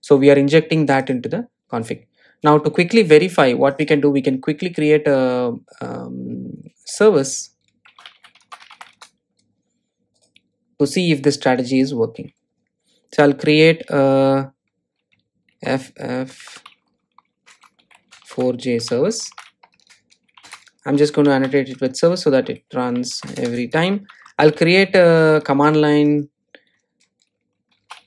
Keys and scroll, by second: 22.5 Return.